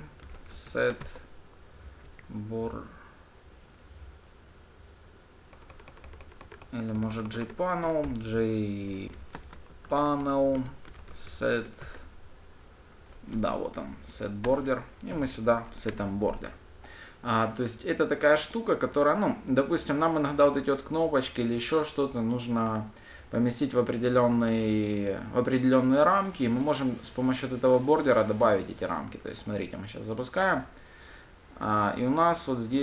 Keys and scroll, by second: 10.4 Return, 11.1 Return, 14.9 Return, 29.9 ctrl+shift+F10.